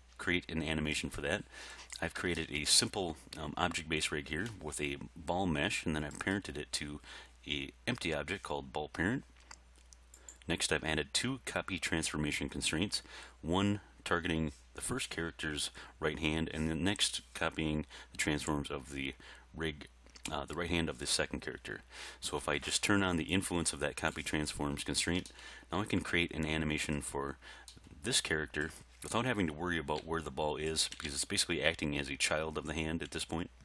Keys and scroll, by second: 30.0 r.